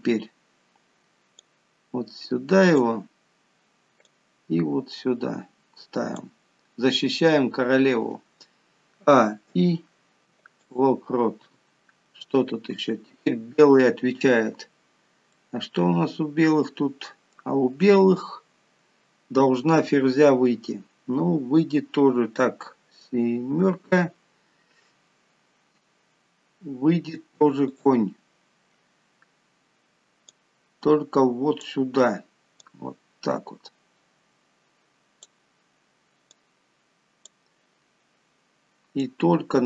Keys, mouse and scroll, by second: 1.6 click, 4.3 click, 9.3 a, 9.7 i, 11.9 scroll up 3, 12.9-15.1 scroll down 2, 15.6 middle click, 23.9 KP_7, 27.9 click, 30.6 click, 32.9 click, 36.6 click, 39.3 click.